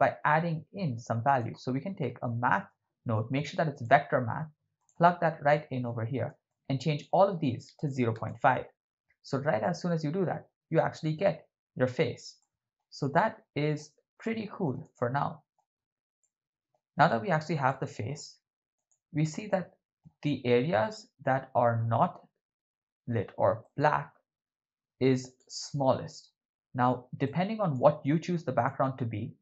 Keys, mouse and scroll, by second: 0.1 shift+a, 5.5 middle click, 6.5-8.3 shift+drag, 11.0-12.4 right drag, 12.4-12.8 middle drag, 13.2-13.8 ctrl+middle drag, 14.2-14.8 ctrl+middle drag, 15.0-15.7 shift+middle drag, 16.2-16.7 ctrl+middle drag, 17.7 middle click, 18.9 right click, 19.5-20.1 middle drag, 23.6-25.4 drag, 27.2-28.6 drag, 28.9-29.4 drag.